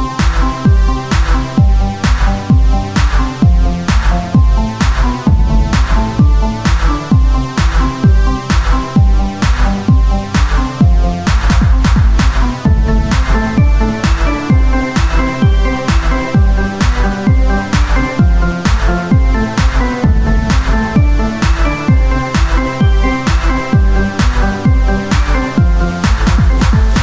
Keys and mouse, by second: 0.0 z, 1.8-2.8 drag, 1.8 shift+a, 4.9 s, 5.8-7.3 drag, 8.0 s, 11.9 s, 14.2 s, 15.2 Tab, 16.7 z, 21.8 a, 22.2 s, 23.4 o, 26.0 ctrl+b.